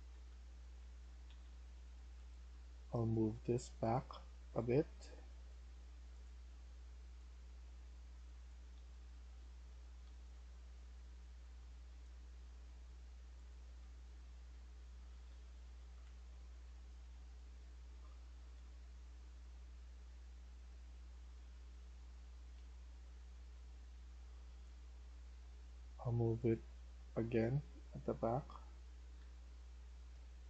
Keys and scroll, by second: 0.0-2.7 typing, 8.3-10.7 typing, 13.7-21.0 typing, 22.5-25.1 typing, 28.6-30.4 typing.